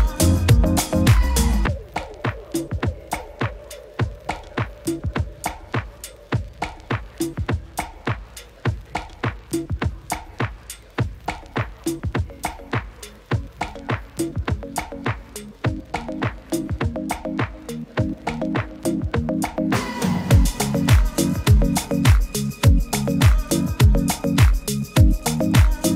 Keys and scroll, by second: 1.9 super++, 2.0 super++, 2.2 super++, 4.1 super++.